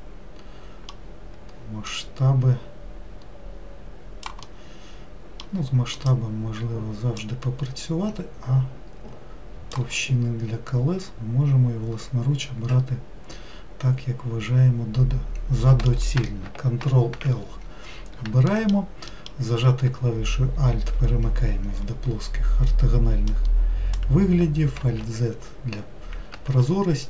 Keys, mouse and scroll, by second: 1.9 click, 4.5-6.0 middle drag, 6.0 click, 7.2 click, 10.1-13.2 middle drag, 16.8 ctrl+l, 18.5 alt+middle click, 19.2 alt+middle click, 23.3 click, 24.8 alt+z, 26.5 ctrl+z.